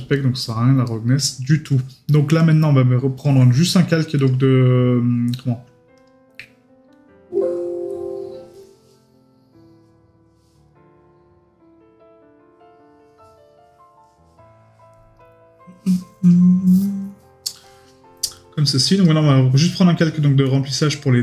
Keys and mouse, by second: 0.1 middle click.